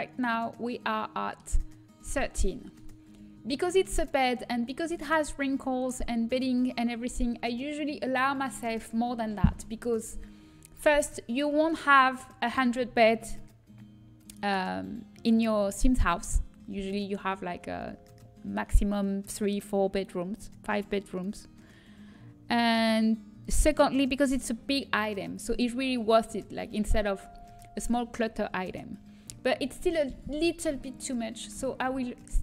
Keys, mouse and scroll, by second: 0.8-2.6 middle drag, 5.5-9.6 middle drag, 30.9-31.9 middle drag.